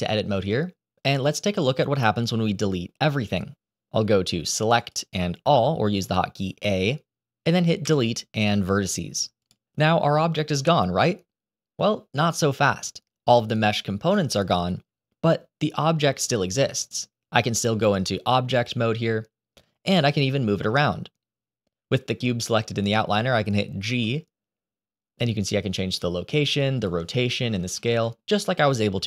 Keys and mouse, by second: 4.7-6.1 drag, 7.7 Delete, 17.7-18.6 drag, 23.7 g, 26.4 click, 27.8 ctrl+z.